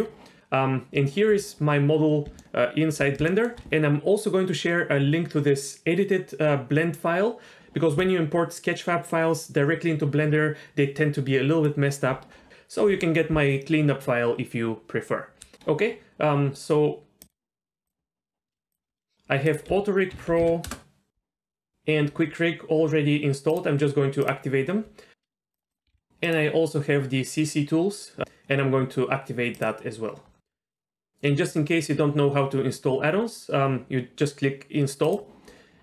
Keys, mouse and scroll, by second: 2.4-3.0 middle drag, 3.3 shift+middle drag, 17.2 click.